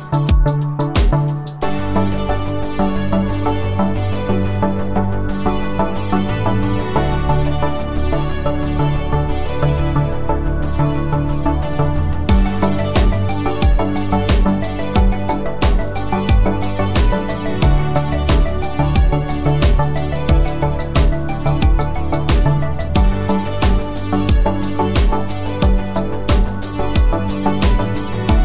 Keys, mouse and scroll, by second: 0.1 space, 2.3-3.3 click, 7.4 click, 9.7 shift+Down, 11.1 shift+Up, 12.7 Right, 13.7 Down, 15.8 Right, 17.1 Up, 17.3 Right, 19.5-21.1 click, 22.6 shift+Right, 23.9 shift+Left, 24.6 shift+Right.